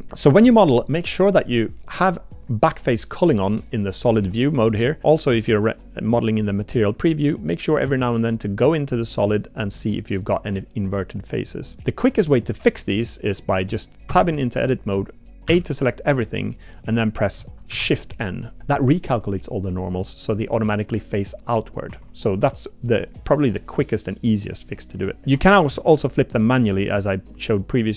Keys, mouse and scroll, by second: 1.9-3.6 drag, 4.0 click, 4.2 z, 5.0 z, 5.3 z, 7.8 z, 9.8 click, 10.0-10.4 middle drag, 10.4 click, 11.6 click, 13.6 click, 14.1 Tab, 15.5 a, 17.7 shift+n, 20.2 click, 21.9 Tab, 23.3 middle click, 25.2 Tab, 25.2 3, 26.1 shift+click.